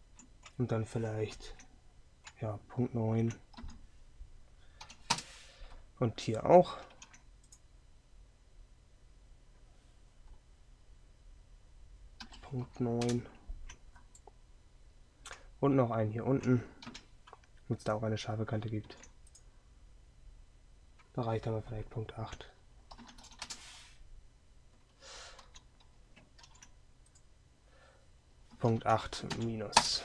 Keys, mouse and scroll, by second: 17.0 KP_3, 25.5 ctrl+z.